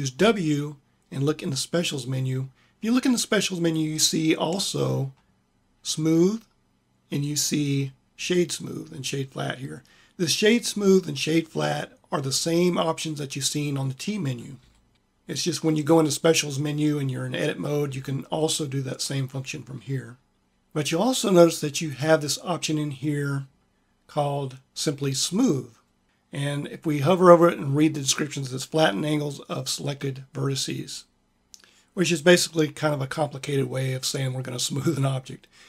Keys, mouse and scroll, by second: 0.0 w, 14.5 w, 17.8 w.